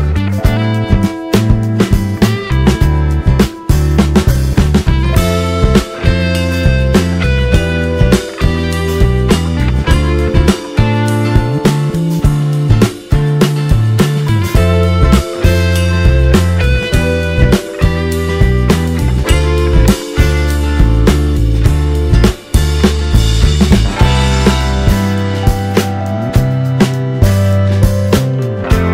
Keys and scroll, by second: 0.0-1.2 typing, 2.3-5.2 typing, 6.6 ctrl+space, 7.5 ctrl+space, 8.2-16.2 typing, 16.7 ctrl+space, 17.7 space, 18.1 space, 24.4 1, 26.9 ctrl+space.